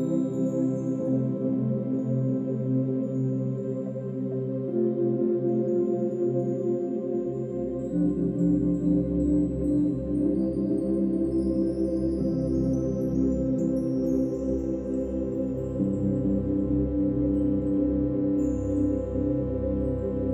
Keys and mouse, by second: 1.7 click, 2.8 click, 5.1-10.1 alt+shift+drag, 11.8 click, 13.1-13.9 drag, 15.0-16.1 drag, 18.9-20.3 drag.